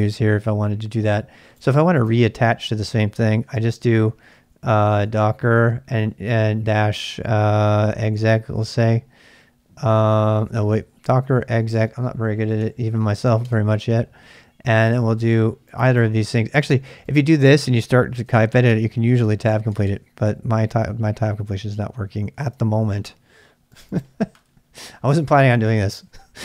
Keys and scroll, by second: 3.1-6.3 typing, 7.6-9.0 typing, 10.4-13.4 typing, 17.7-18.5 typing, 18.7 Tab, 19.0 Tab, 22.0 BackSpace, 22.2 BackSpace, 22.4 BackSpace.